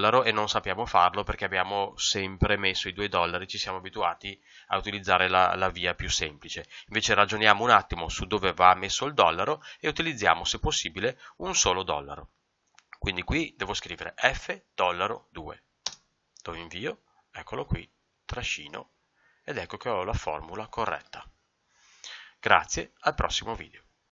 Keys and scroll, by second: 15.8 ctrl+Return.